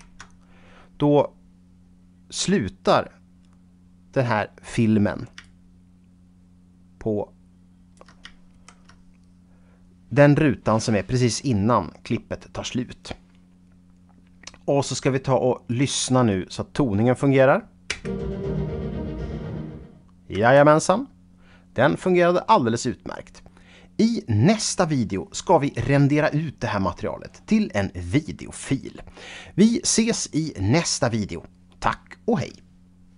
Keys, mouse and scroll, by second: 5.4-8.3 shift+right drag, 8.6 shift+Right, 15.8 shift+right click, 18.0 space, 20.4 space, 24.1 scroll down 2.